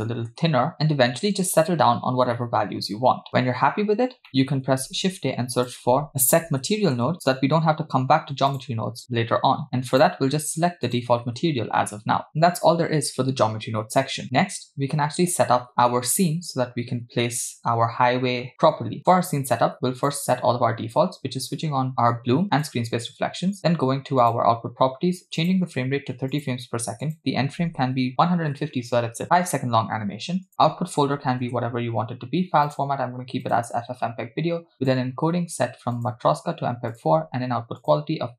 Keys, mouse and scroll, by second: 0.8-2.4 scroll down 2, 2.4 middle click, 4.0 scroll down 2, 4.3 middle click, 4.8 shift+a, 9.9-11.0 drag, 20.0 click, 21.9 click, 22.6 click, 24.2 click, 25.4-26.5 drag, 27.1-28.6 drag, 29.2-30.5 scroll down 2, 30.5-31.5 drag, 31.3 /, 32.7-33.7 drag, 34.0-34.3 scroll down 2, 34.8 click, 35.1-36.0 scroll down 2, 36.0-37.1 drag, 37.8-38.3 drag.